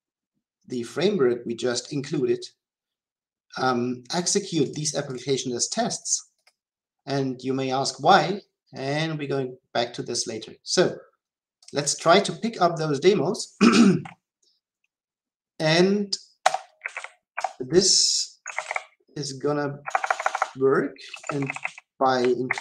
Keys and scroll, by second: 17.3 Return, 18.5 Return.